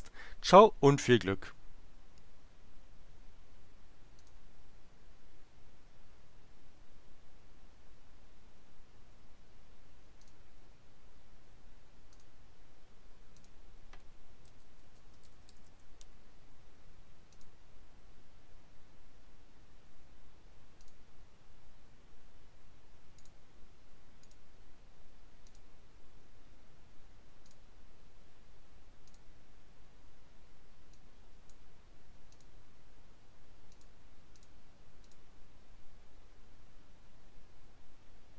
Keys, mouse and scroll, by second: 4.2 click, 10.2 click, 12.2 click, 13.3 click, 14.5 Right, 14.8-16.1 typing, 17.3 click, 20.8 click, 23.2 click, 24.2 click, 25.4 click, 27.4 click, 29.0 click, 30.8 click, 32.3 click, 33.7 click, 34.3 click, 35.0 click.